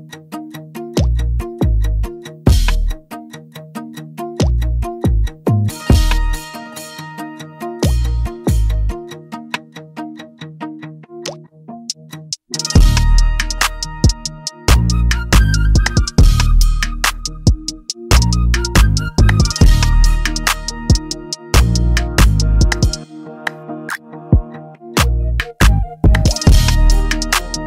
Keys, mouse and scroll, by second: 0.0 click, 0.3 click, 0.5 click, 3.1 click, 5.2 click, 5.8 click, 8.6 click, 10.4 click, 12.2 ctrl+-, 12.4 click, 13.1 click, 13.6 click, 15.3 click, 15.9 click, 17.6 click, 17.9 click, 18.1 click, 18.5 click, 18.7 click, 19.1 click, 19.5 click, 19.7 click, 20.2 click, 20.5 click, 21.9 click, 23.7 click, 24.1 click, 24.3 click, 24.7 click, 26.5 click, 26.9 click, 27.2 click.